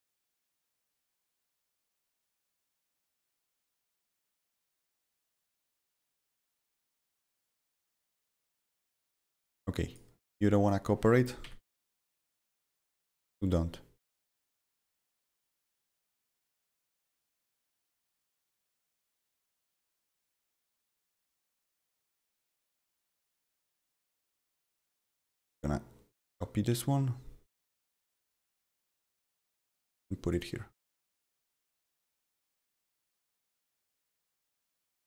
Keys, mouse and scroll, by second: 0.2 ctrl+z, 1.4 click, 2.5 click, 2.9 ctrl+z, 3.4 click, 3.6 right click, 4.3 click, 7.7 click, 9.4 click, 9.8 click, 10.6 click, 11.4 Delete, 12.1 click, 13.0 click, 15.0 click, 15.0 double click, 15.7 click, 15.8 double click, 17.9 click, 19.1 click, 20.3 click, 20.4 double click, 22.0 click, 22.8 click, 23.5 click, 25.1-27.8 drag, 29.6-34.1 drag, 34.1-35.0 drag.